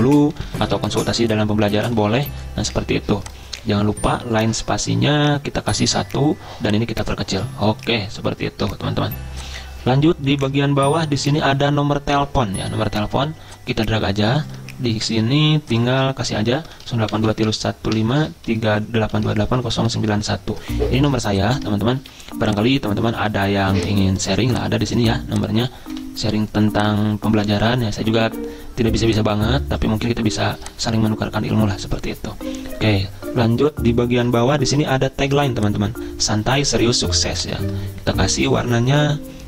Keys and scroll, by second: 0.0-1.1 typing, 10.0 Up, 10.1 Up, 10.4 Down, 16.0 ctrl+a, 16.5-20.7 typing, 22.0 ctrl+z, 26.0 -, 37.6 ctrl+a.